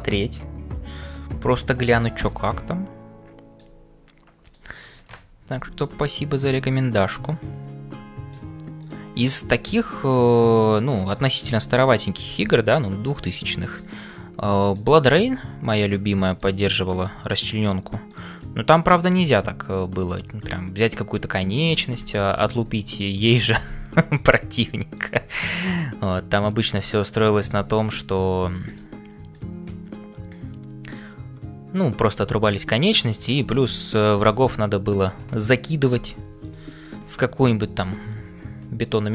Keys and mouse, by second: 0.0-39.1 typing, 2.3-3.7 middle drag, 4.4 click, 4.9 middle click, 7.0-8.5 middle drag, 8.8 click, 10.0 middle click, 11.1 click, 13.5 middle click, 14.0 click, 14.6 middle click, 16.8 middle click, 18.1 click, 18.6 middle click, 20.4-21.9 middle drag, 22.3 alt+click, 25.7-27.5 middle drag, 29.3-33.1 middle drag, 33.3 shift+click.